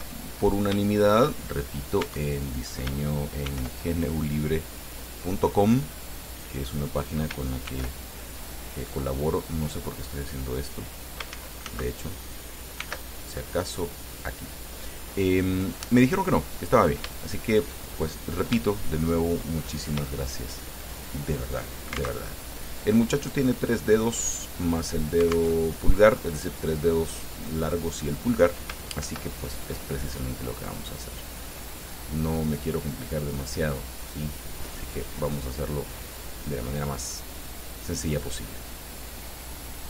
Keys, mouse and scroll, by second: 1.7-2.1 shift+scroll up 3, 2.3 Tab, 3.8 ctrl+r, 4.5 click, 6.5 click, 7.9 ctrl+r, 8.5 ctrl+click, 10.8 click, 11.6 ctrl+z, 13.0 ctrl+r, 14.2 click, 16.2 click, 16.6 click, 17.4 shift+click, 18.9-20.4 shift+drag, 22.4 alt+Tab, 25.8 alt+Tab, 29.3 ctrl+r, 30.9-31.5 scroll up 4, 32.5 scroll up 2, 34.6 click, 35.1 click, 39.6 click.